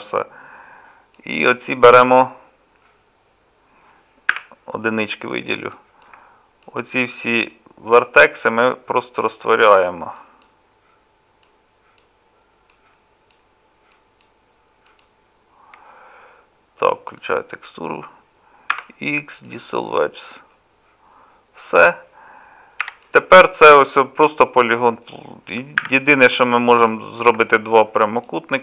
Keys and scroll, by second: 4.3 1, 18.7 x, 25.8 1.